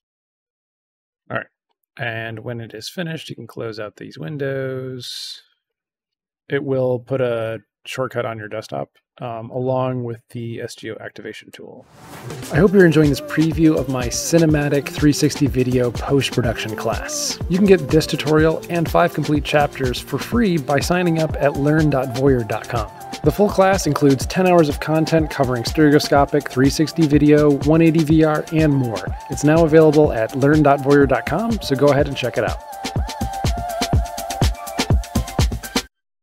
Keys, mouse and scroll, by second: 9.4 click, 11.4 click.